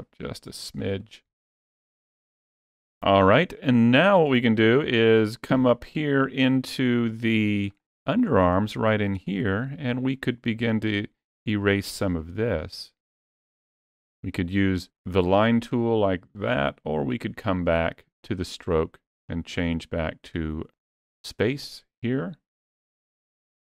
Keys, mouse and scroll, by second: 4.6 middle click, 5.5 scroll up 2, 5.8 middle click, 6.4 ctrl+middle click, 7.0 scroll up 2, 7.3 shift+middle click, 7.8 middle click, 8.1 scroll up 2, 8.8 shift+middle click, 11.8 click, 16.2 middle click, 18.0 click.